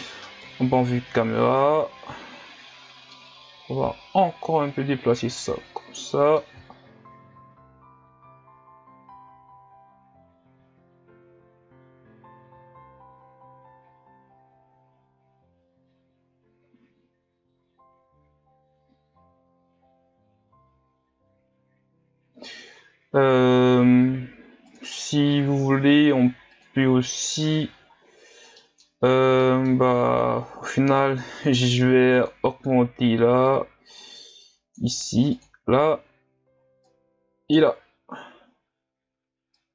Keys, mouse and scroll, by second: 0.4 KP_0, 3.2-6.2 middle drag, 7.1-7.9 scroll up 3, 8.5 scroll up 1, 10.3 scroll down 1, 10.9-11.3 scroll up 1, 24.8 click, 26.8 click, 31.2-36.9 drag, 39.6-39.7 drag.